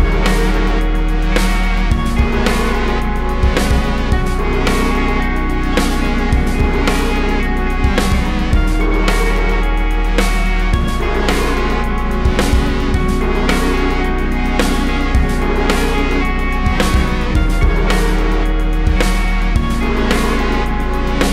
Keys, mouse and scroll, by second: 0.0 click, 1.8-7.4 shift+drag, 16.4-17.3 scroll down 2, 17.3 z, 17.5 alt+a, 18.2 scroll up 1, 19.0 click, 19.2 Tab, 21.0 click, 21.2 KP_Decimal.